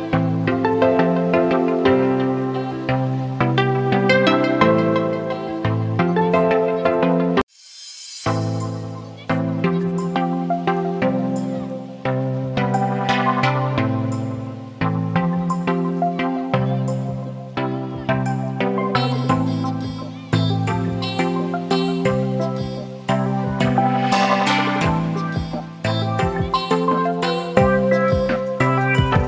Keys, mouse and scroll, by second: 10.6 click, 10.6 a, 13.4 click, 13.4-15.8 drag, 13.4 a, 15.8 ctrl+r, 17.7 t, 19.2 click, 20.6 ctrl+t, 22.2-26.8 drag, 26.8-29.1 alt+drag, 29.1-29.2 alt+drag.